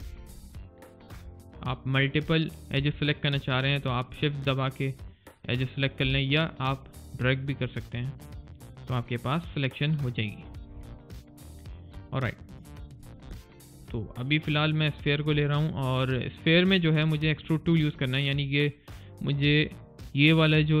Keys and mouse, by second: 0.8 click, 1.7 shift+click, 3.4 shift+click, 4.5 shift+click, 6.3 click, 8.1 alt+click, 10.2 right click, 11.4 click, 12.1 shift+click, 13.1 Delete, 14.1 alt+click, 14.9 click, 15.3 alt+middle click, 15.7 alt+click, 16.1 alt+middle click, 16.7 alt+right click, 17.4 alt+middle click, 17.7 alt+right click, 18.5 alt+middle click, 19.6 click, 20.6 alt+click.